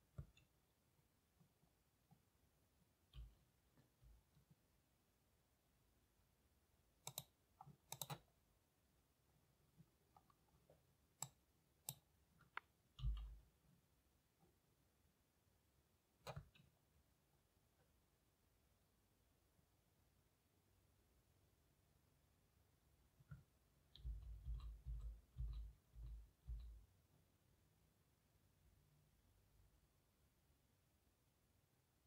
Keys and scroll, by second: 1.5 typing, 13.1 m, 24.1-26.0 typing.